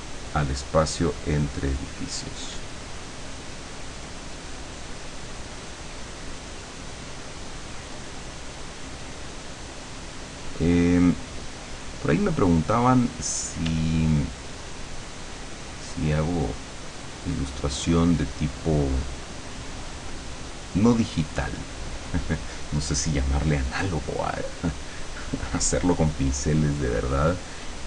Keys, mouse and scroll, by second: 0.3 middle click, 0.9-2.2 drag, 2.6-12.6 drag, 13.7 d, 14.1-19.1 drag, 20.1-22.1 drag.